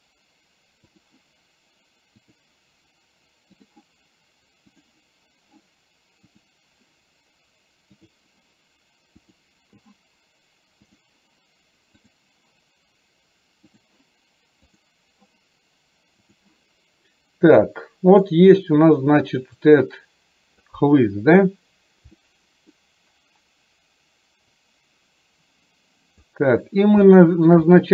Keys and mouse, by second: 2.2 click, 4.8 click, 6.4 click, 8.1 click, 12.1 click, 13.7 click, 17.8 middle click, 19.8 click, 22.2 middle click, 24.6-26.4 drag, 27.1 shift+middle click, 27.7 middle click.